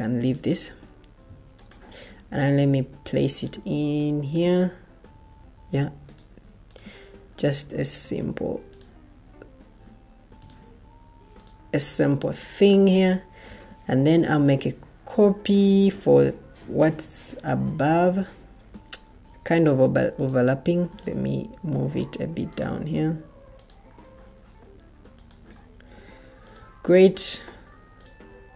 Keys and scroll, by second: 13.4 ctrl+d, 21.8 ctrl+d.